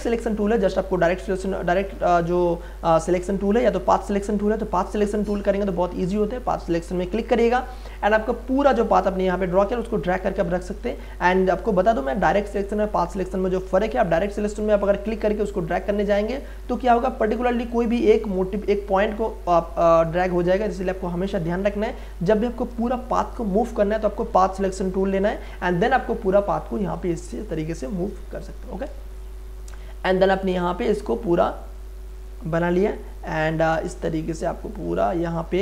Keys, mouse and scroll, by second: 0.9 right click, 1.0 right click, 7.2-12.2 drag, 12.2 right click, 15.0-19.8 drag, 19.8 ctrl+z, 21.7 right click, 24.7-29.0 drag, 29.0 space, 29.1-35.6 ctrl+drag.